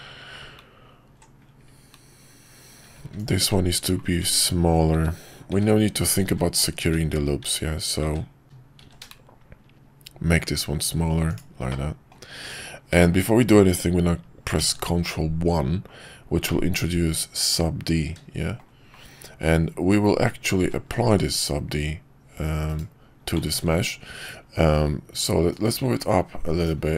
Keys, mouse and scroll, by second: 2.9 alt+z, 4.2 `, 4.9-8.8 `, 8.8 s, 11.7 middle click, 12.3 Tab, 13.0 middle click, 14.8 ctrl+1, 16.4-18.6 middle drag, 20.6 ctrl+`, 23.6 ctrl+`.